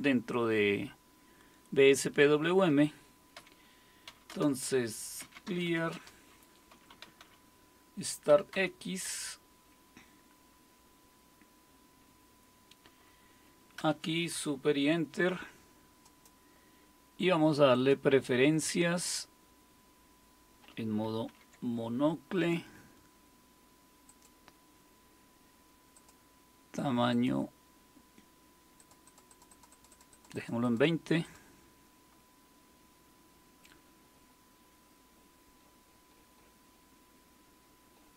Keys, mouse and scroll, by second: 3.4-4.1 typing, 4.3 Return, 5.1-9.0 typing, 13.8 super+Return, 17.7 click, 21.3 super+m, 24.1 click, 26.0 click, 27.1 click, 28.8-31.9 drag, 36.1-37.5 scroll down 2, 37.5-38.1 scroll down 1.